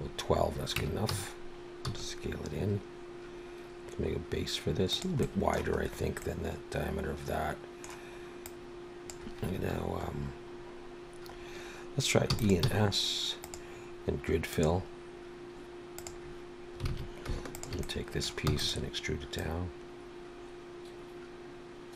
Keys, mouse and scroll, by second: 0.0-0.8 scroll down 3, 0.8 Tab, 1.1 a, 1.9 s, 5.2 middle click, 5.8-6.9 scroll up 3, 6.2 middle click, 8.5 click, 10.1 scroll up 2, 11.3-11.6 scroll up 2, 12.3 e, 12.6 s, 14.5 click, 16.9 alt+a, 17.5 alt+shift+click, 17.8 middle click, 18.5 e, 19.4 click.